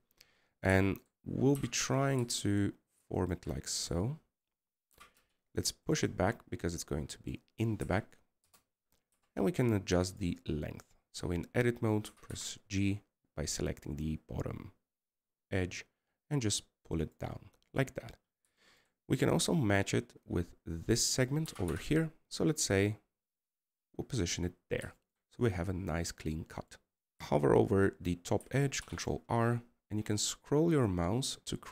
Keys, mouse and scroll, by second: 1.5 KP_0, 2.6 middle click, 3.0 scroll up 2, 9.6 KP_1, 10.2 KP_0, 20.4 middle click, 20.7-23.2 scroll up 4, 25.5-26.3 scroll down 3, 26.3-26.7 scroll down 4, 26.7 middle click.